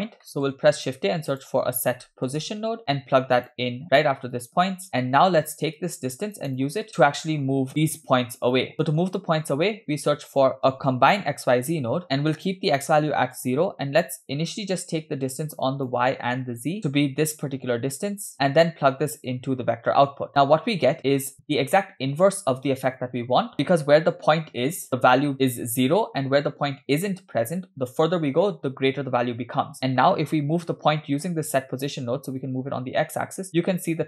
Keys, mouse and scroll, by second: 0.3 middle click, 0.8 shift+a, 4.9 middle click, 5.0-5.8 scroll up 2, 5.8 click, 6.8-7.3 scroll down 4, 6.9-7.5 middle drag, 7.5 scroll up 2, 7.7 click, 8.7 middle click, 9.8 shift+a, 14.7-16.0 drag, 16.8 click, 18.1 click, 19.2-20.3 drag, 21.2 scroll up 3, 21.4 scroll down 3, 29.8 middle click, 30.6-31.7 scroll up 3, 31.0 middle click, 32.5-34.0 shift+drag.